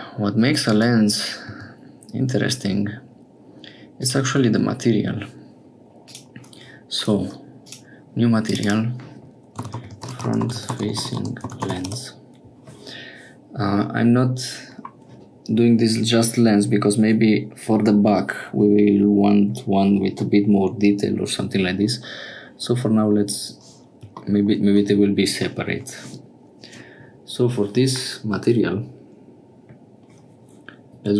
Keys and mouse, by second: 1.4 s, 4.2 Escape, 6.0 click, 7.6 click, 8.4 click, 8.6-12.5 drag.